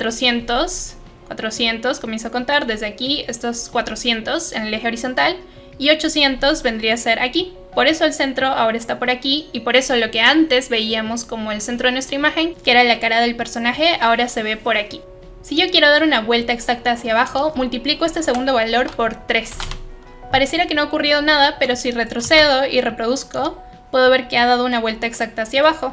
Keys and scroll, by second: 18.2 Right, 18.7 Right, 19.5 Right, 19.6 Return.